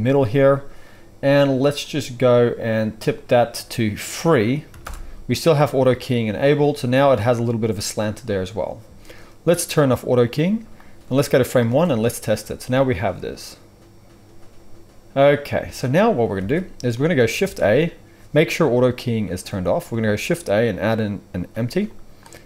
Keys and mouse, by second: 10.0-10.7 middle drag, 10.7-22.4 drag, 11.6 space, 15.5 space, 16.3 alt+a, 17.3 shift+a, 19.9 shift+a.